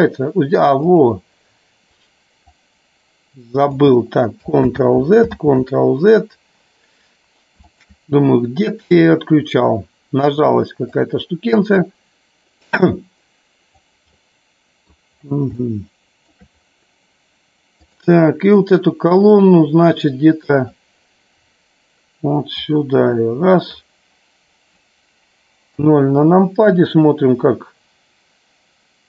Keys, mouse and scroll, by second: 0.9 click, 2.5-3.9 drag, 4.7 ctrl+z, 5.4 ctrl+z, 7.8 shift+click, 8.9-11.1 drag, 11.9-13.8 drag, 14.2 middle click, 15.7 shift+middle click, 17.8 click, 19.3-20.8 drag, 22.7-23.8 drag, 25.7 KP_0.